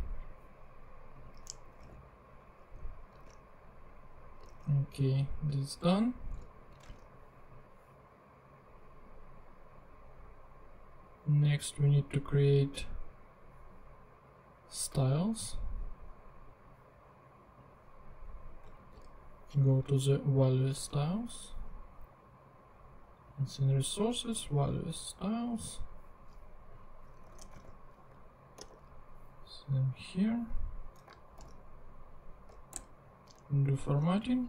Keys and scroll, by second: 1.6 Return, 1.8 super+v, 3.2 super+Tab, 4.6 super+Tab, 6.4 super+s, 6.9 super+Tab, 18.7 super+c, 20.7 super+Tab, 27.2 Return, 27.6 super+v, 28.6 super+r, 31.4 alt+super+l, 32.8 alt+super+Return, 33.6 Return.